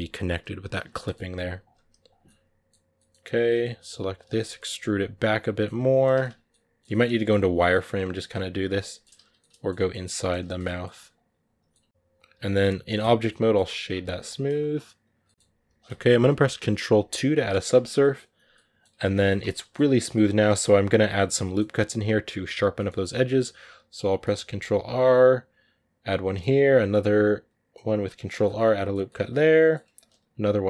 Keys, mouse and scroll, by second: 0.8 middle click, 1.2 g, 1.7 r, 2.0-3.1 middle drag, 3.1 right click, 3.3 middle click, 3.6 r, 3.8 g, 4.2 middle click, 4.5 e, 5.2 middle click, 5.5 g, 6.0 z, 6.2 scroll down 1, 6.3-7.3 middle drag, 7.3-9.0 typing, 8.5 middle click, 9.2 middle click, 9.7 scroll up 2, 9.9 middle click, 10.7 r, 11.0 g, 11.5-12.9 middle drag, 12.9 w, 13.1 middle click, 13.3-13.8 scroll down 8, 13.8 a, 14.0 middle click, 14.2-14.7 scroll up 5, 14.9 right click, 15.0 middle click, 15.4 g, 16.8 ctrl+2, 17.2 middle click, 17.5 scroll up 2, 17.8-19.2 middle drag, 19.2 Tab, 19.3 middle click, 19.7-20.2 scroll up 2, 19.7 middle click, 21.2 middle click, 22.1-22.5 scroll up 1, 22.5 middle click, 22.8 scroll up 1, 22.9-24.1 middle drag, 24.1 ctrl+r, 26.2 ctrl+r, 28.2 middle click, 28.7 scroll down 2, 28.9 middle click, 29.6 scroll up 1, 29.9 ctrl+r.